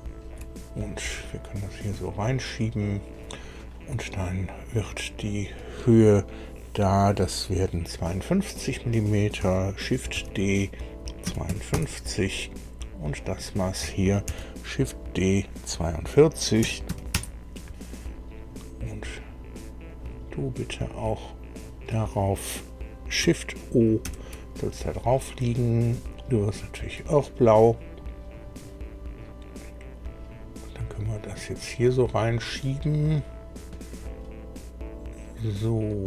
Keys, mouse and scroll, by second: 1.5 click, 5.2 click, 10.1 shift+d, 11.2 KP_5, 11.4 KP_2, 11.7 KP_Enter, 13.2 click, 14.2 shift+d, 16.6 KP_4, 16.8 KP_2, 17.1 KP_Enter, 19.8 click, 21.5 click, 24.0 shift+o, 26.7 click, 28.3 click, 30.9-36.0 drag.